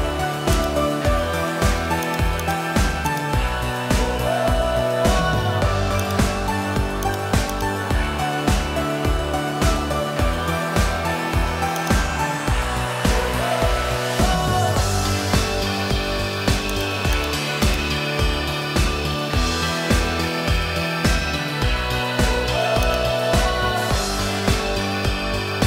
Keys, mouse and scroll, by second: 0.5 click, 1.7 Tab, 3.1 shift+click, 4.3 ctrl+p, 6.8 Tab, 7.5 click, 7.9 g, 13.0-14.3 middle drag, 16.1 Tab, 16.7 click, 17.6 shift+click, 19.0 KP_3, 20.4 g.